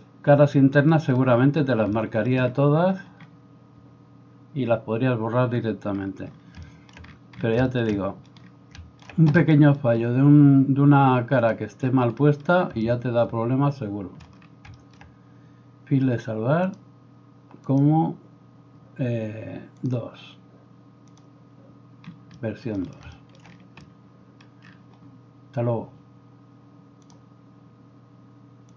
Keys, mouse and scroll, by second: 11.6-16.7 middle drag, 16.7-28.7 drag.